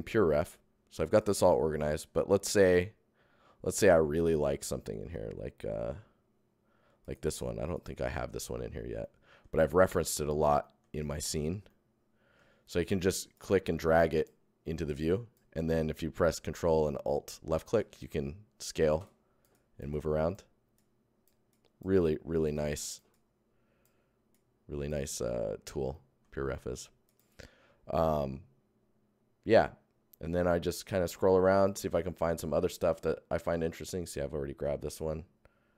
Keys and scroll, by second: 2.1 Tab, 7.6 Tab, 8.0 Tab, 9.6 Tab, 10.8 Tab, 15.8 ctrl+Tab, 16.5 ctrl+Tab, 19.0 alt+Tab, 27.0 Tab.